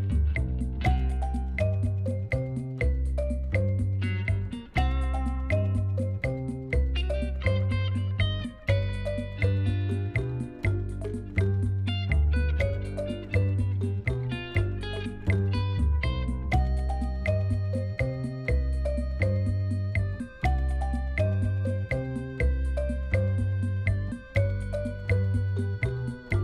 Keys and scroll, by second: 1.9 shift+z, 3.4 g, 5.3 shift+z, 8.4 g, 11.8 shift+z, 15.8 shift+z, 17.9 g, 18.2 x, 20.0 shift+z, 24.4 Tab.